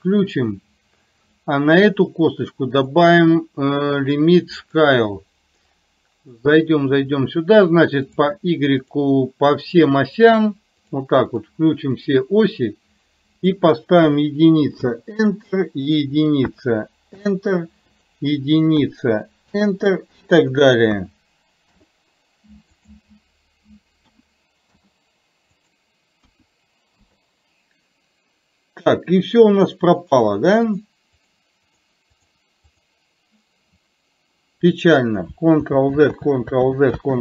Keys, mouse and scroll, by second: 2.9-4.8 drag, 8.9 click, 9.8 drag, 13.5-14.9 drag, 16.0-17.3 drag, 18.0-19.6 drag, 20.5-21.8 drag, 22.9-24.8 drag, 25.6-27.0 drag, 31.3 click, 32.3 click, 32.8 click, 35.8 ctrl+z, 36.1 ctrl+z, 36.8 ctrl+z, 37.1 ctrl+z.